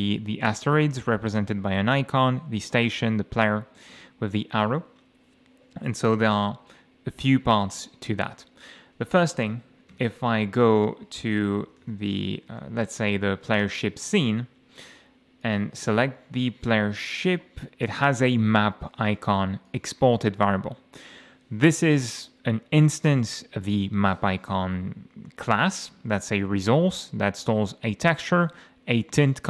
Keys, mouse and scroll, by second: 4.0 F8, 7.8-8.2 scroll up 2, 9.9 ctrl+shift+o, 11.4-13.0 typing, 13.0 Down, 13.6 Return, 15.4 click, 19.7 click, 21.0 click, 28.3 click.